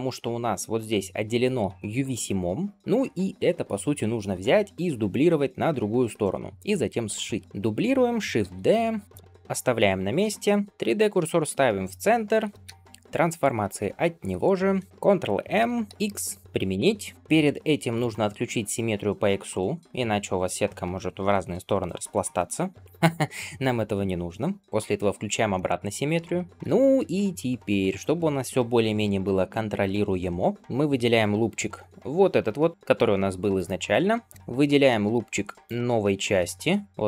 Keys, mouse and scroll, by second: 1.3 scroll down 1, 1.7 shift+middle click, 2.7 scroll down 1, 4.8-5.4 scroll down 1, 6.2 shift+middle click, 7.3 scroll up 1, 7.4 middle click, 8.3 shift+d, 14.8-15.5 scroll down 1, 15.5 ctrl+m, 24.6 click, 25.4 shift+middle click, 26.2 middle click, 26.5 scroll up 5, 26.7 alt+z, 27.3 scroll up 2, 28.9 alt+click, 30.0-30.7 scroll down 3, 30.4 middle click, 30.6 click, 31.4 g, 33.8-35.0 scroll up 6, 35.5 alt+shift+click, 36.4-36.7 scroll down 2, 36.8 g.